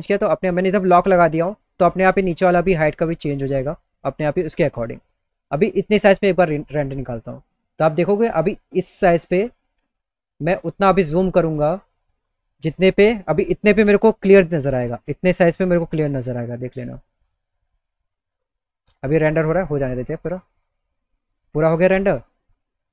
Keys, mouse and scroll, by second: 2.9 click, 6.5 click, 10.4 click.